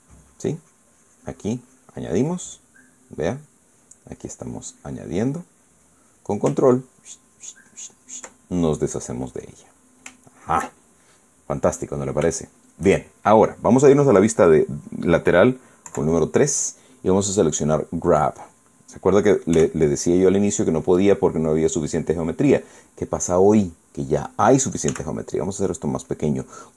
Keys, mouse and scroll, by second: 0.0-3.3 ctrl+drag, 3.4-4.6 middle drag, 4.9-7.1 drag, 7.5 ctrl+click, 9.2 ctrl+middle click, 10.9-13.7 shift+drag, 13.7 shift+middle click, 13.8-15.9 shift+scroll up 1, 16.6 KP_3, 17.8 click, 18.9 click, 20.3 f, 21.6 click, 25.6 f.